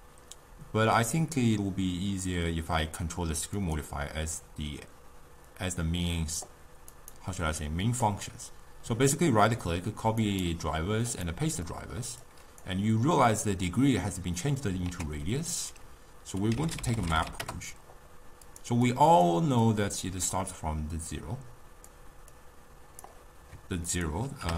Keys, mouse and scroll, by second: 6.9-10.0 right drag, 10.2-11.7 right drag, 11.7 middle click, 12.3-14.9 drag, 14.9 ctrl+a, 18.9 click, 19.7-22.4 drag, 23.9-24.5 drag.